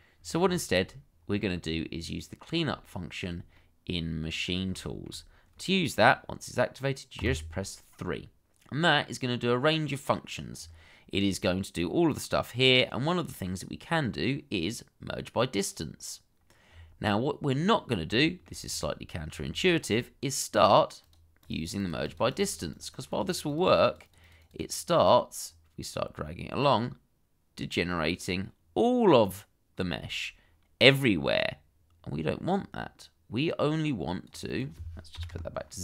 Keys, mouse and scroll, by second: 0.1-0.4 scroll down 1, 0.5 shift+middle click, 2.1 middle click, 2.8 shift+middle click, 3.5 middle click, 4.8 shift+middle click, 7.3 3, 10.5 scroll up 1, 17.2-18.0 scroll up 1, 18.1 shift+middle click, 18.6-19.2 scroll up 1, 19.2 scroll down 1, 19.6 shift+middle click, 21.4 double click, 35.1 0, 35.3 Return.